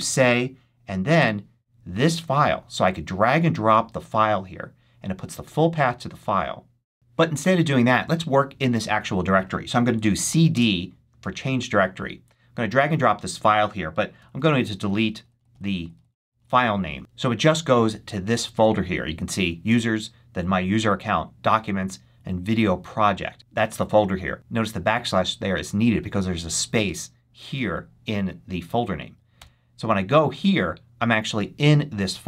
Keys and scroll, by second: 0.0-0.3 typing, 9.7-10.6 typing, 14.1 BackSpace, 29.2 Return.